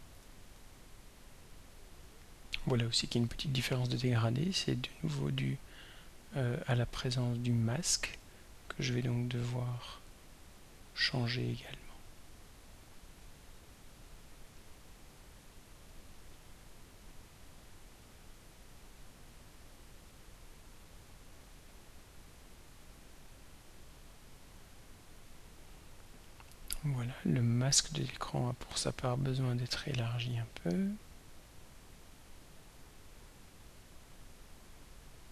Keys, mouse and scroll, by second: 1.4-1.7 scroll down 1, 3.6 click, 5.9 click, 17.3-20.2 drag, 21.8-24.8 drag, 27.8 click, 29.7-32.3 drag, 33.6-35.3 drag.